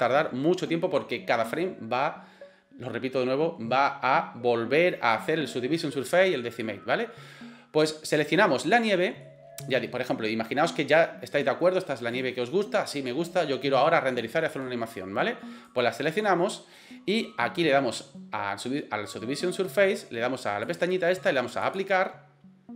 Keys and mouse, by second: 8.8 middle click, 12.1 right click, 12.5 middle click, 13.4-13.7 middle drag, 15.7 right click, 20.8-22.4 right drag.